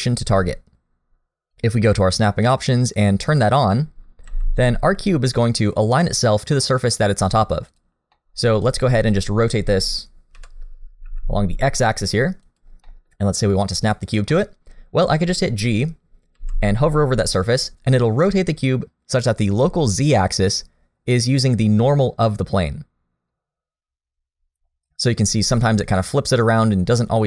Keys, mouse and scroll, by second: 1.5 click, 4.3 g, 8.2 middle click, 8.7 click, 9.9 KP_1, 10.3 KP_3, 11.1 r, 12.9 middle click, 13.2-13.9 scroll up 1, 13.9 click, 14.3 middle click, 15.4 middle click, 16.4 g.